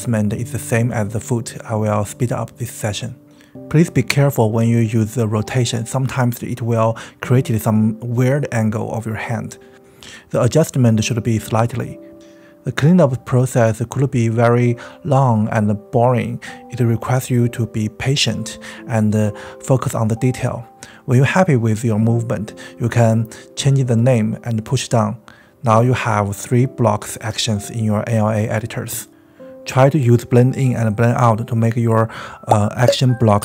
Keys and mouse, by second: 0.0-3.0 typing, 0.0 click, 0.2 click, 0.3 click, 0.8 click, 1.0 click, 1.2 click, 1.4 middle click, 1.5 click, 1.9 middle click, 2.1 click, 2.4 middle click, 3.2 middle click, 3.4 click, 3.6 click, 3.7 shift+middle click, 4.0 middle click, 4.2-12.6 typing, 4.4 click, 4.6 middle click, 5.1 middle click, 5.6 middle click, 6.3 shift+middle click, 6.5 click, 6.7 ctrl+z, 6.8 click, 6.9 middle click, 7.7 drag, 8.1 middle click, 8.3 click, 8.7 click, 9.1 middle click, 9.2 click, 9.5 click, 10.0 click, 10.1 middle click, 10.5 middle click, 10.6 click, 10.8 middle click, 10.9 click, 11.0 middle click, 11.1 middle click, 11.3 click, 12.4 click, 21.1-23.3 drag, 24.0 click, 24.7 space, 25.0-28.4 drag, 28.4 space.